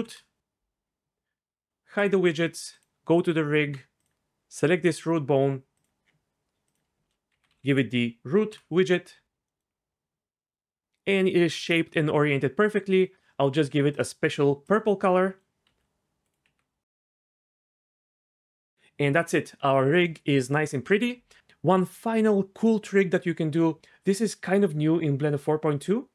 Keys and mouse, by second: 3.3 Tab, 6.8-8.5 drag, 7.6 o, 9.9 middle click, 13.0 click, 14.0-14.7 drag, 15.1-15.6 middle drag, 15.6-18.2 typing, 17.2 click, 18.0 right click.